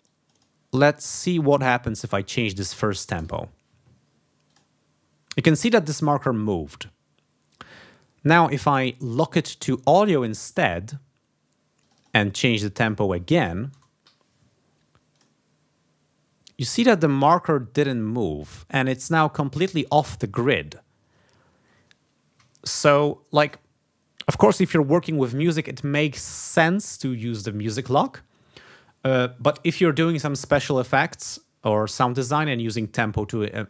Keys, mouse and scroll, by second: 0.0 click, 0.9 click, 2.1 click, 3.0 BackSpace, 3.2 0, 4.4 click, 9.0 right click, 10.5 click, 11.8 click, 12.7 click, 13.7 BackSpace, 14.0 7, 15.1 click, 19.4 ctrl+scroll up 2, 20.8 ctrl+scroll down 2, 21.3 ctrl+scroll down 2, 22.6 ctrl+scroll up 2, 23.0 ctrl+scroll down 2.